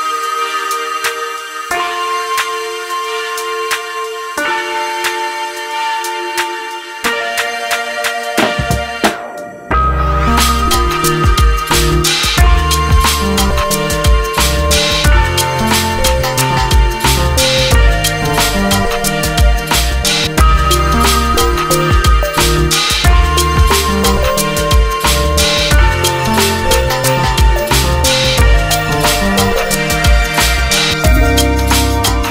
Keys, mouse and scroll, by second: 0.2-1.9 drag, 2.2-5.2 drag, 5.2 ctrl+space, 5.8 g, 7.3 ctrl+click, 7.7 g, 9.0 ctrl+click, 9.1 ctrl+click, 12.9 shift+click, 13.5 Tab, 13.9 Tab, 16.6 ctrl+click, 17.2 g, 18.8 ctrl+click, 19.0 ctrl+click, 20.6 Tab, 20.8 Tab, 22.0 ctrl+click, 22.7 Tab, 23.6 click, 23.8 click, 26.0 shift+h, 26.7 Tab, 28.0 ctrl+click, 28.4 g, 30.2 g, 31.9 g.